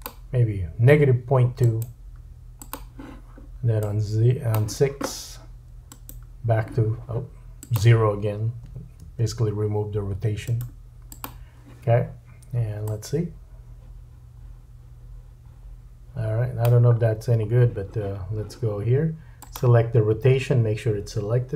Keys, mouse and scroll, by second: 1.6 right click, 3.8 click, 5.9 right click, 7.6 click, 10.4 right click, 12.9 click, 19.5-21.5 drag.